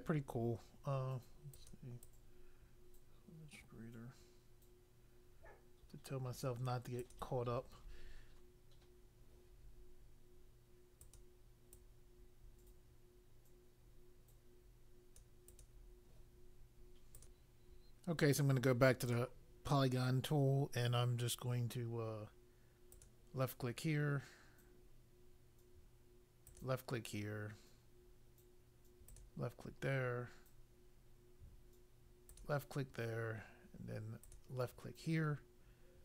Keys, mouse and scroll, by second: 1.5 click, 2.0 click, 7.0 click, 11.0 click, 11.7 click, 15.5 click, 17.1 click, 19.0 click, 22.9 click, 26.4 click, 29.0 click, 32.2 click, 34.2 click.